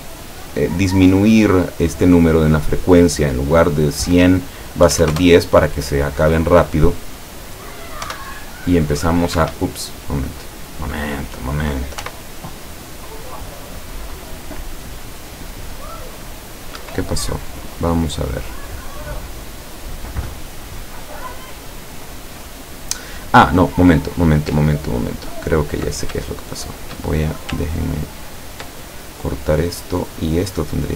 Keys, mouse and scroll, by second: 0.2 click, 1.4 click, 2.3 click, 4.9 KP_1, 5.1 KP_0, 5.2 KP_Enter, 8.2 p, 9.5 Escape, 10.5-11.1 middle drag, 12.1 p, 15.5-16.0 scroll down 2, 16.0-16.9 scroll up 2, 16.9 Escape, 16.9-17.3 scroll up 1, 17.3-18.9 middle drag, 25.4 ctrl+click, 26.4 shift+click, 28.2 ctrl+click, 30.3-30.9 drag.